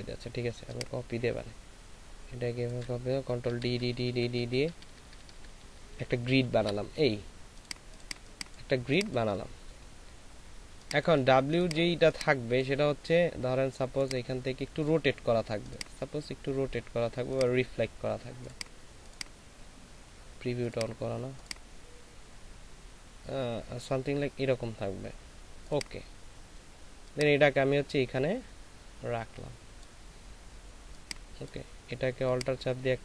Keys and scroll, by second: 3.5 ctrl+alt+shift+d, 3.7 ctrl+alt+shift+d, 3.9 ctrl+alt+shift+d, 4.1 ctrl+alt+shift+d, 4.5 ctrl+alt+shift+d, 4.7 ctrl+alt+shift+d, 5.1 ctrl+alt+shift+d, 8.1 space.